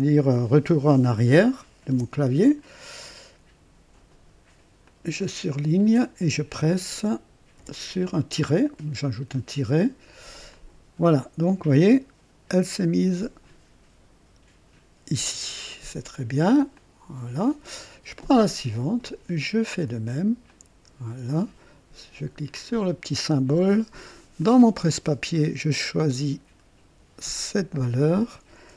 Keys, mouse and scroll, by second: 1.9 BackSpace, 4.8 click, 7.6 -, 10.5 click, 16.7 click, 18.3 click, 19.8 click, 20.5 click, 22.5 click, 24.4 click, 27.5 click.